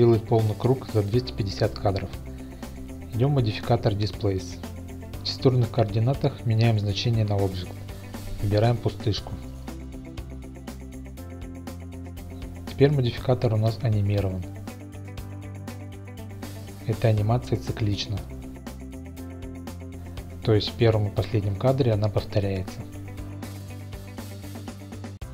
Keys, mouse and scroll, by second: 4.3 click, 5.1 click, 5.9-6.4 drag, 10.9-12.3 drag, 14.7 space, 15.8 shift+middle drag, 16.3-16.9 middle drag, 17.9 space, 21.2 click.